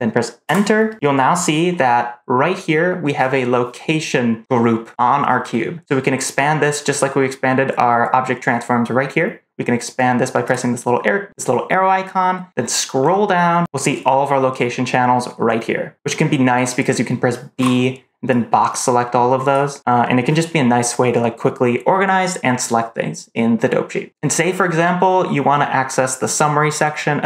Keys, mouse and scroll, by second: 10.3 click, 12.9-13.4 scroll down 2, 17.4 b.